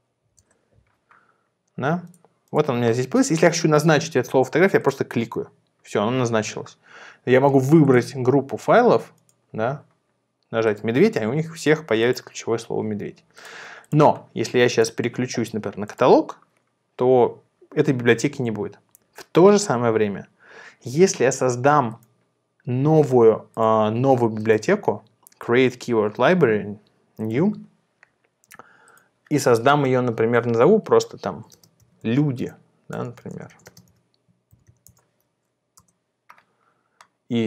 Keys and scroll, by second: 0.0-0.2 typing, 0.5 Return, 31.5-35.2 typing, 35.9 Return.